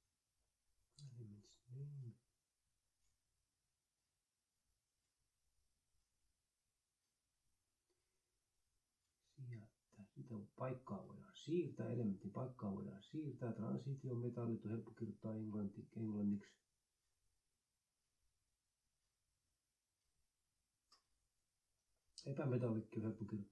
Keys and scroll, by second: 0.8 Right, 0.9-4.0 typing, 4.0 Delete, 6.0 Up, 6.5 ctrl+Left, 6.9 Delete, 16.7 n, 17.1 space, 17.8 ctrl+Right, 18.3 BackSpace, 19.1 s.